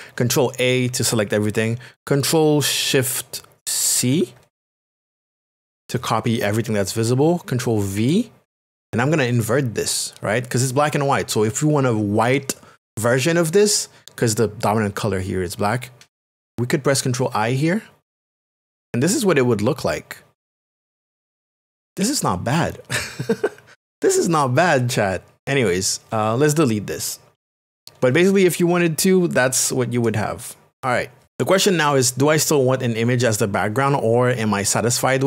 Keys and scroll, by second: 0.2 ctrl+a, 7.9 ctrl+v, 18.1 ctrl+i.